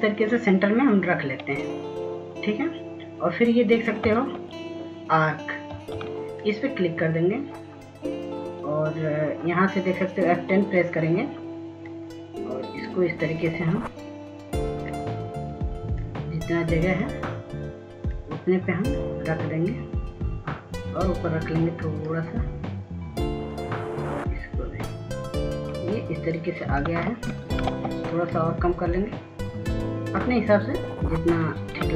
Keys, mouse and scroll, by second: 0.9-3.4 shift+drag, 7.5 ctrl+s, 8.9 s, 9.6-30.2 drag, 30.3 ctrl+space, 31.0 ctrl+space, 31.6-31.9 drag.